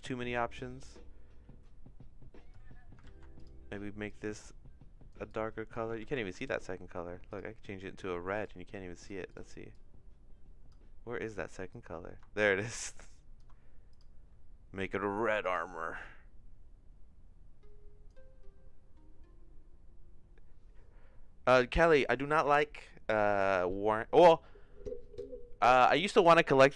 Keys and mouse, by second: 3.1 ctrl+z, 6.0 ctrl+z, 9.3 click, 11.7-13.4 drag, 15.4 click.